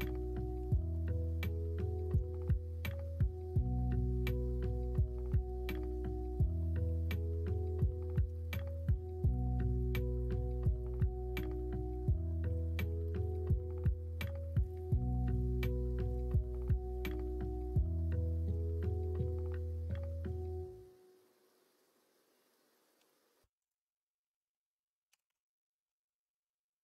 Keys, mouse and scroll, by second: 5.0 e, 6.8 3, 8.7 p, 9.7 Tab, 10.5-12.6 middle drag, 13.2 middle click, 17.9 middle drag, 18.3 alt+z, 18.6-19.0 middle drag, 21.1 Tab, 22.9 2, 25.1 g.